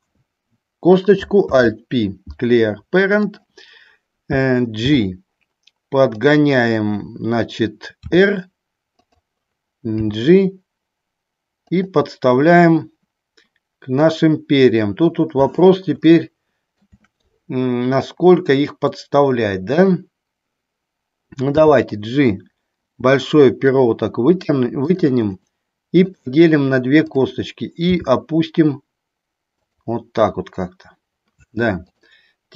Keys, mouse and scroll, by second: 1.6 alt+p, 5.1 g, 6.3 click, 8.2 r, 10.1 g, 11.8 click, 16.3 shift+middle click, 19.8 click, 21.5 g, 25.0 click, 28.1 g, 29.7 click, 32.1 click.